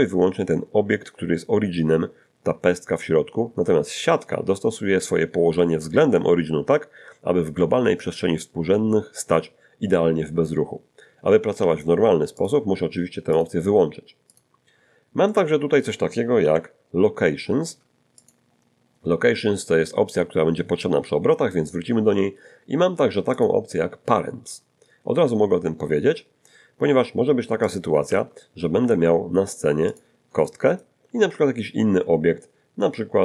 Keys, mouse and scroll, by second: 11.6 g, 12.4 click, 13.3 click, 14.3 click, 15.3 middle click, 16.4 1, 18.2 click, 23.4 click, 27.5 x, 27.7 click, 28.1 shift+c, 28.8 a, 29.9 click, 30.4 shift+middle click, 31.1 shift+a.